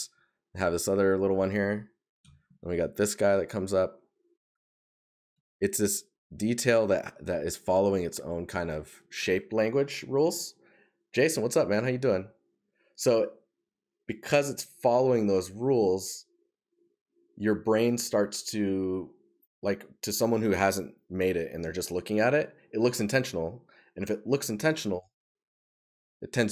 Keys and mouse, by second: 7.9 right click.